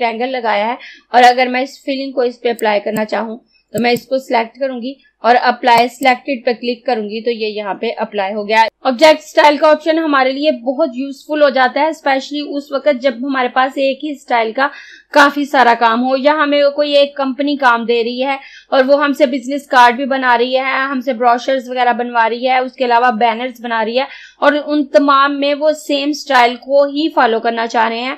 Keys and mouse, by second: 2.7 click.